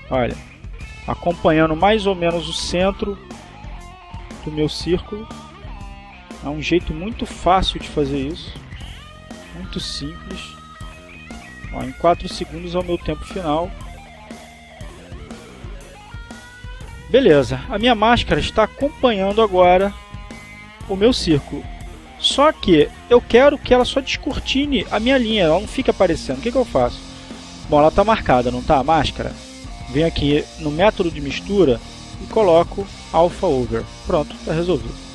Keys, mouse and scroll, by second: 2.9-4.1 drag, 4.6-7.0 drag, 7.4-8.7 drag, 8.9-10.9 drag, 11.2-13.3 drag, 13.9-17.0 drag, 18.9-22.1 drag, 22.5 click, 28.2 click, 30.8 click, 31.9 click, 34.1 click.